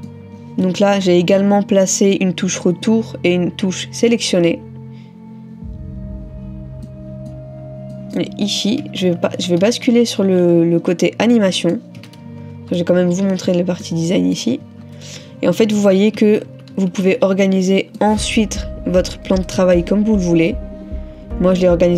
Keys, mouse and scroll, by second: 0.9 ctrl++, 6.9 middle click, 8.8 middle click, 9.1 ctrl+-, 9.4 ctrl+-, 9.9 ctrl+-, 11.4 middle click, 12.6 ctrl++, 13.9 middle click, 14.7 middle click, 16.2 ctrl+-, 16.5 ctrl+-, 17.0 ctrl+-, 18.0 middle click, 19.3 ctrl++, 19.6 ctrl++.